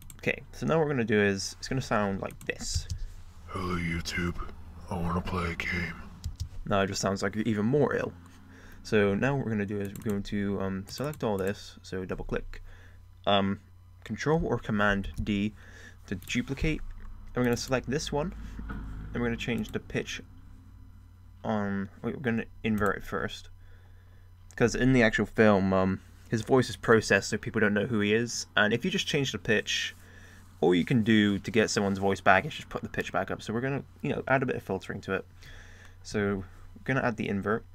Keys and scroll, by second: 3.2 space, 6.6 space.